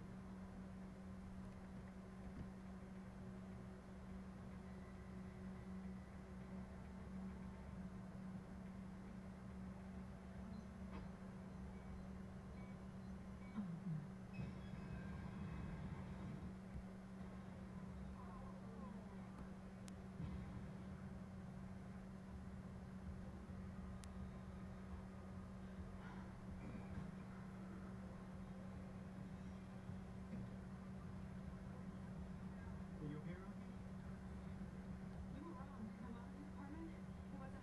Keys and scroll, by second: 4.9 Delete, 15.9 Right, 17.3 shift+Right, 18.1 shift+Right, 19.9 Right, 23.9 Right, 24.9 Right, 35.8 Delete.